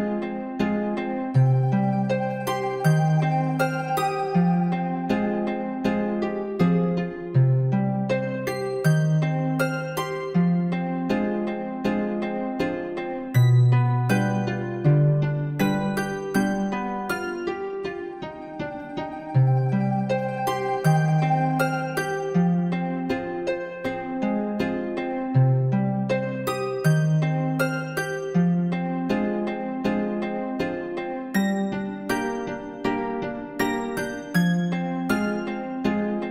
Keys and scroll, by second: 9.0 ctrl+0.